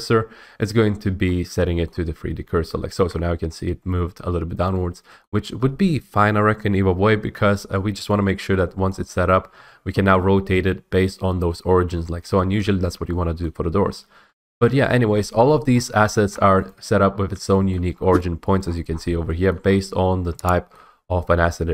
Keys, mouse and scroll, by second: 2.0 middle click, 2.1-2.8 scroll, 5.3-7.4 middle drag, 8.2 middle click, 9.0 middle click, 9.5 typing, 12.4 Escape, 12.9 scroll, 12.9 middle click, 13.5 middle click, 13.7 scroll, 13.9 ctrl+z, 14.4 ctrl+z, 14.8-15.7 middle click, 15.0 middle click, 15.5 middle click, 15.8 scroll, 16.4 middle click, 16.7 click, 17.1 middle click, 17.2 middle click, 17.3 middle click, 17.8 middle click, 18.0 middle click, 18.1 middle click, 18.7-19.7 scroll, 19.3 shift+middle click, 20.8 scroll.